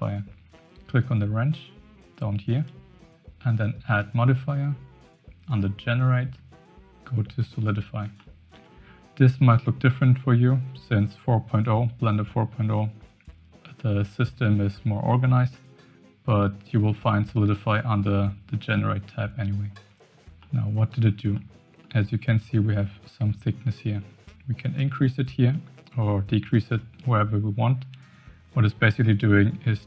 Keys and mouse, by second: 2.5 click, 3.9-7.5 drag, 8.2-8.6 shift+middle drag, 20.4-21.0 middle drag, 21.3-21.9 shift+middle drag, 24.7-29.2 shift+drag.